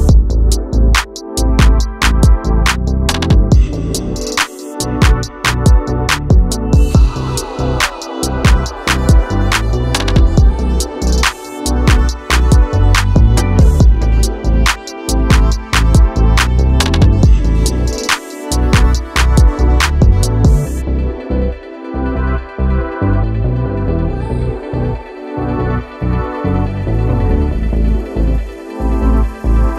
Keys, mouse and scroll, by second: 0.0 click, 2.0 click, 2.8 click, 4.3-7.3 drag, 12.1-19.0 drag, 24.9 click, 28.2 click.